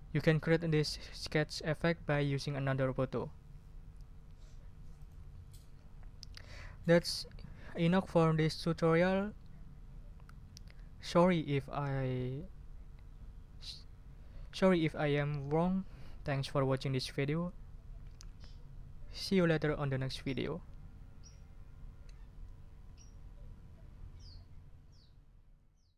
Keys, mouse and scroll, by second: 5.0 click.